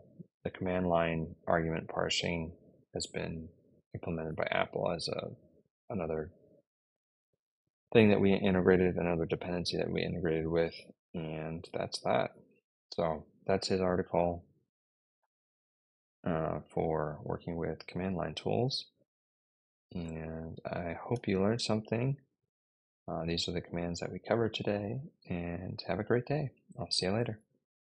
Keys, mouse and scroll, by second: 19.9 super+Tab.